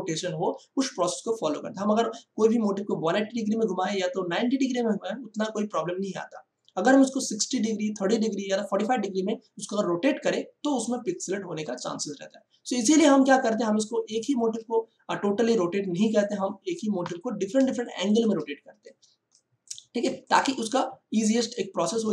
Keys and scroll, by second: 12.9 space, 16.9 Delete, 17.6 space.